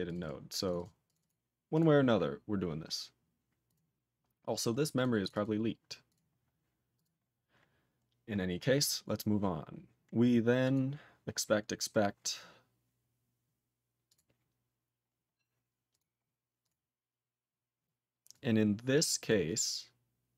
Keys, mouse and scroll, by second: 0.1 click, 0.2 double click, 0.2 double click, 0.6 click, 0.7 click, 0.7 double click, 0.8 double click, 1.0 click, 1.1 click, 1.2 double click, 1.2 double click, 1.7 click, 1.8 click, 2.9 scroll down 2, 3.6 click, 3.7 click, 4.9 click, 5.0 click, 5.2 click, 5.2 click, 5.3 double click, 5.4 double click, 6.1 click, 6.1 click, 6.9 click, 7.0 click, 7.3-7.9 scroll down 3, 8.0 scroll down 2, 10.6 click, 10.7 click, 11.6-12.4 scroll down 5, 12.4 scroll down 3, 13.1-13.7 scroll down 3, 14.1 click, 14.1 click, 15.0-15.9 scroll up 5, 15.9 click, 16.0 click, 16.2 scroll down 1, 16.6 click, 16.7 click, 17.2 click, 17.5 scroll down 2, 18.3 click, 19.3 click.